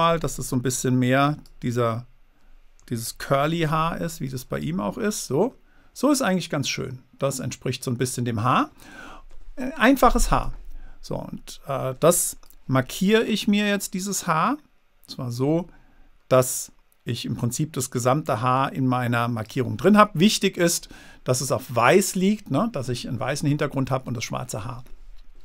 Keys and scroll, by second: 0.0 super+z, 3.4 super+z.